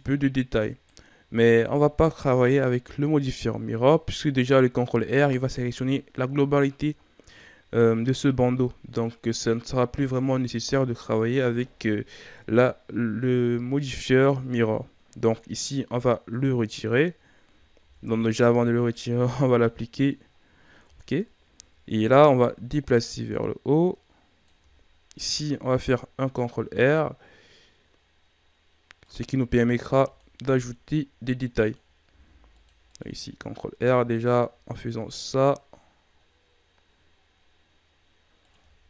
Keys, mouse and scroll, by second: 1.4 Tab, 4.2 Tab, 10.6 Tab, 16.3-17.7 drag, 17.7 ctrl+z, 19.1-20.8 drag, 20.8 Tab, 22.7-25.1 drag, 25.1 ctrl+r, 29.5 ctrl+r, 32.0 ctrl+r, 33.7 s.